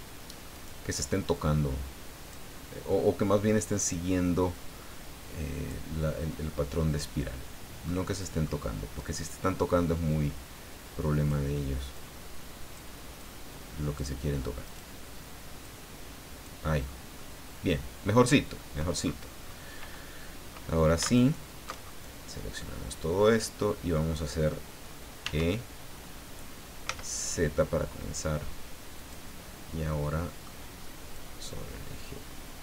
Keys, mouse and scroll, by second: 0.5 right click, 1.3 click, 3.8 right click, 4.5-5.8 drag, 6.4 scroll down 1, 6.8-8.0 middle drag, 9.0 right click, 10.1-11.5 drag, 11.9 click, 13.2 click, 14.6 right click, 15.6 click, 16.8 scroll down 2, 17.1-19.0 middle drag, 19.0-19.6 scroll up 3, 19.3 middle click, 19.6 middle click, 21.1 alt+shift+right click, 21.5 alt+shift+middle click, 21.8-22.3 alt+shift+scroll down 1, 22.3-24.1 middle drag, 22.6 click, 25.2 e, 26.9 z, 28.9 click, 29.9 middle click, 31.1-32.6 drag.